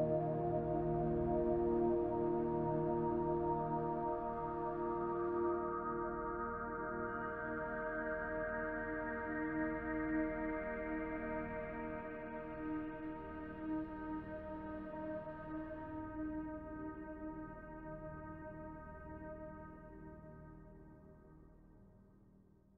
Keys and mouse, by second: 1.4 click, 2.7-3.4 drag, 4.0-4.3 drag, 6.1 click, 6.5 click, 7.7-8.5 drag, 10.2-10.8 drag, 12.1 click, 13.0 shift+click, 13.9 ctrl+p, 15.2 click, 16.1-16.9 drag, 17.4-17.8 drag, 18.1 click, 20.1 click, 20.8 click, 22.4-22.7 drag.